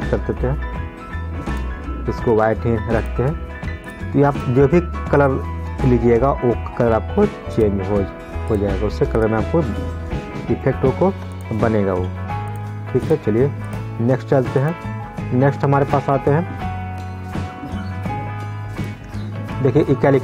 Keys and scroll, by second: 0.0 ctrl+z.